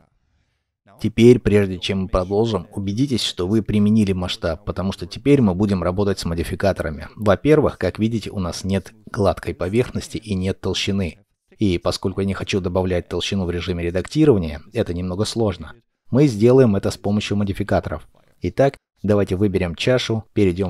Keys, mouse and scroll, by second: 0.8-1.6 scroll up 1, 6.5 n, 7.6-8.1 scroll up 1, 8.1 middle click, 9.9-10.7 scroll, 10.7 middle click, 11.9 scroll down 1, 12.3 shift+middle click.